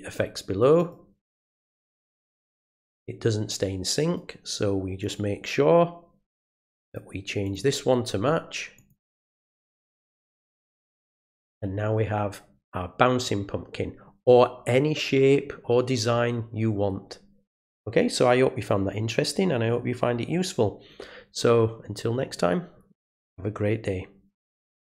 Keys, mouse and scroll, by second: 0.8 click, 4.0 right click, 5.0 click, 6.4 click, 6.9 click, 7.4 click, 8.7 click, 9.8 click, 10.9 click, 24.9 click.